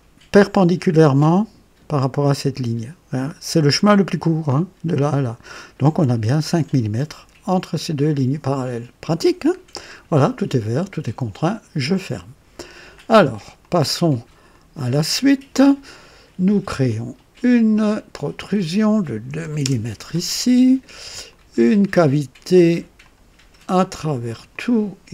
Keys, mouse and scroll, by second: 9.5 scroll down 1, 11.4 click, 13.6 click, 14.5 click, 16.8 click, 18.1 click, 19.3-19.9 typing, 19.6 KP_Enter, 21.3 click, 23.0 click, 23.8 click, 24.3 typing, 24.5 click.